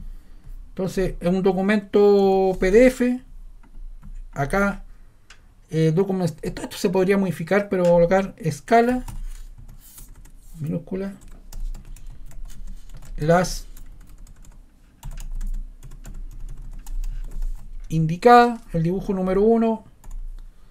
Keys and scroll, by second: 1.9-3.1 typing, 8.6-10.1 typing, 11.2-17.8 typing, 20.0 1.